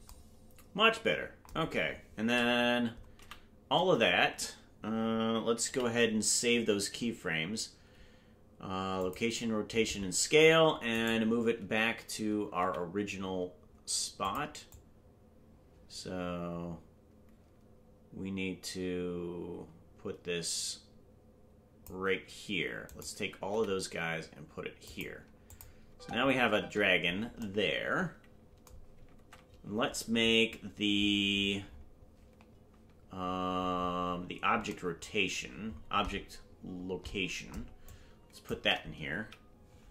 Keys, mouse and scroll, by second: 3.2 a, 13.1 right click, 13.1 g, 14.7-21.8 drag, 25.5 click, 25.5 right click, 25.5 g, 25.8 space, 27.4 space, 29.2 ctrl+Tab, 31.3-32.5 scroll down 7, 32.5-34.6 scroll down 4, 34.6-37.5 scroll down 11, 37.9 click, 39.2 Right.